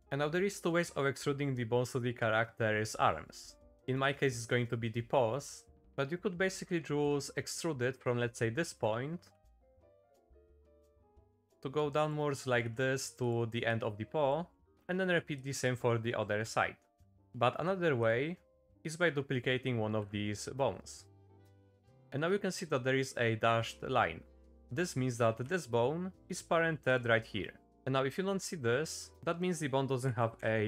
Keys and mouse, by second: 4.0 middle click, 5.7 middle click, 5.8 z, 6.1 middle click, 7.1 middle click, 8.9 shift+middle click, 9.3 e, 10.2 middle click, 10.6 click, 11.2 middle click, 11.8 click, 12.4 shift+middle click, 13.7 click, 14.6 middle click, 15.4 click, 16.1 middle click, 17.0 ctrl+z, 17.6 shift+middle click, 18.7 middle click, 20.0 shift+d, 21.8 shift+middle click, 22.6 middle click, 23.0 shift+middle click, 25.4 g, 26.8 click, 29.1 F3, 29.1 BackSpace.